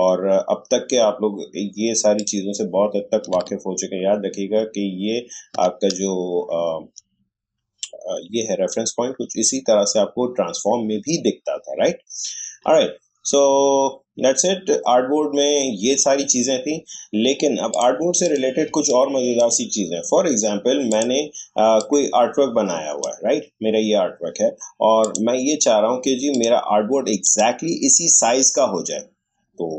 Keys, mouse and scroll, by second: 2.1 click, 4.2-5.4 alt+scroll up 1, 6.3 shift+scroll up 1, 12.3 shift+scroll down 1, 17.7 click, 18.6 space, 18.9 click, 19.2 space, 20.9-25.0 drag, 25.0 click.